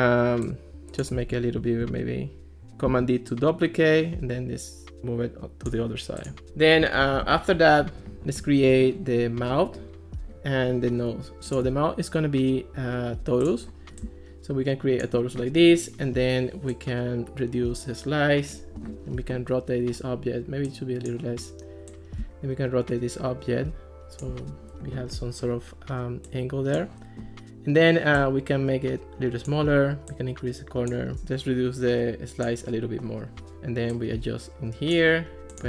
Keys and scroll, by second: 2.9 super+d, 7.3 alt+r.